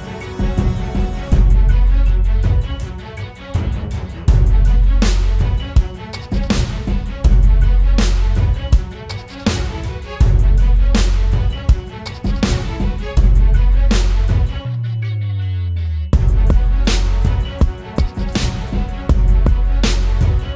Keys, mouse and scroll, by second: 1.1 typing, 3.6 ctrl+t, 4.7 ctrl+click, 6.6 Return, 8.3 Right, 8.5 Right.